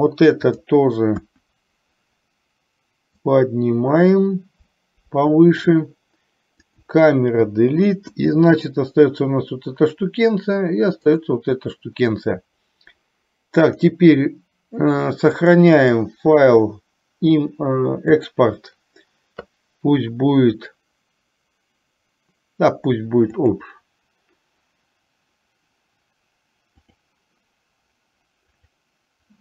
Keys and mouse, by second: 0.7 click, 1.3 KP_1, 3.2-5.8 drag, 6.8 click, 7.6 Delete, 11.2 click, 13.7-15.5 drag, 15.8-24.1 drag.